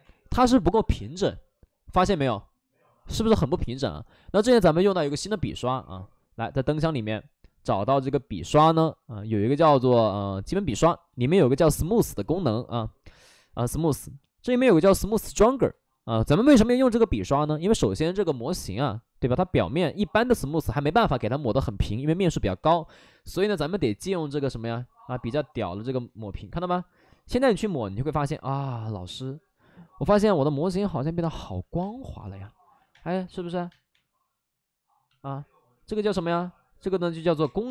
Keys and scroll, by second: 31.7-33.8 typing, 37.3 space.